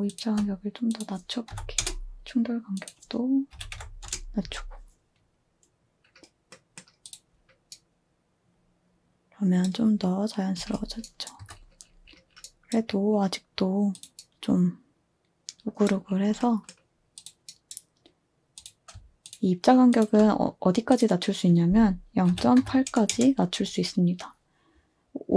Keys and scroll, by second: 1.2-4.4 typing, 6.6-7.3 typing, 10.5-11.3 typing, 15.8 typing, 22.3-23.0 typing, 23.1 Return.